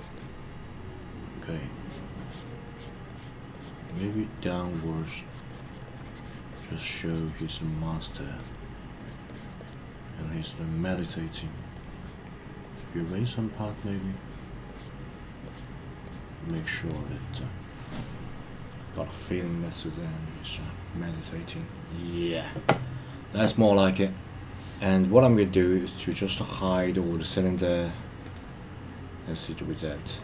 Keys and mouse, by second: 0.0 click, 0.1 click, 1.7 click, 2.2 click, 2.7 click, 3.1 click, 3.5 click, 3.8 click, 4.6 click, 5.0 click, 5.3 click, 5.5 click, 5.8 click, 6.5 click, 6.8 click, 7.1 click, 8.1 click, 8.4 click, 9.0 click, 9.2 click, 9.6 click, 11.7 click, 12.6 click, 13.0 click, 14.1 click, 14.7 click, 15.4 click, 16.0 click, 16.4 click, 16.9 click, 21.1-22.3 middle drag, 25.9 click, 26.6 click, 27.5 click, 28.2 click.